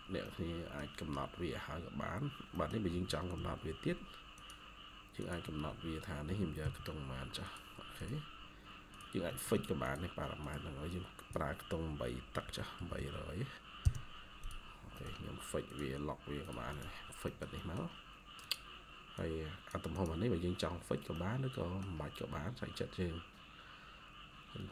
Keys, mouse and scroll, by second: 0.1 middle click, 2.4 middle click, 3.0-3.8 typing, 5.3 Escape, 5.6 Escape, 6.2-9.3 typing, 6.9 scroll up 1, 8.2 scroll up 1, 9.4 Escape, 10.8 double click, 12.1-13.4 typing, 13.7 Return, 14.6 scroll down 1, 14.8 middle click, 16.6 double click, 16.9 scroll down 1, 17.2 middle click, 21.0 middle click.